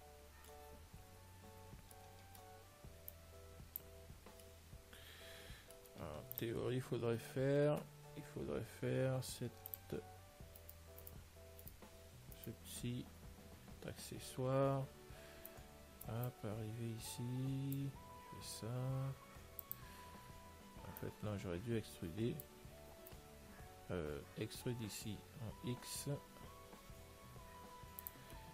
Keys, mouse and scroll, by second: 3.0 middle click, 3.4 click, 4.7-6.6 middle drag, 6.5 ctrl+s, 7.0 Tab, 10.0 click, 10.9-14.3 right drag, 14.2-15.8 middle drag, 15.8-18.4 drag, 18.4 r, 21.3 click.